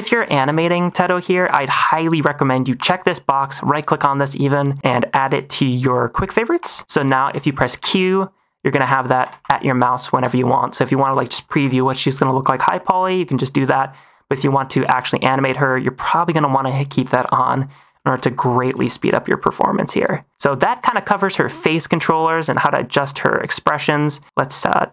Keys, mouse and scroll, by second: 0.3 click, 0.8 shift+middle drag, 1.6 click, 2.7 click, 3.4-6.6 right drag, 7.2 shift+middle click, 7.7 q, 9.1 q, 9.7 middle click, 10.0 q, 10.5 middle click, 11.0 middle click, 11.4 shift+middle click, 11.7 middle click, 12.7 shift+middle click, 13.5 middle click, 14.0 shift+middle click, 14.8 q, 17.9 shift+middle drag, 18.1 -, 18.7 shift+middle click, 19.1 middle click, 19.9 click, 20.3 middle click, 20.8 shift+middle drag, 22.3 click, 23.2 click, 24.6 click.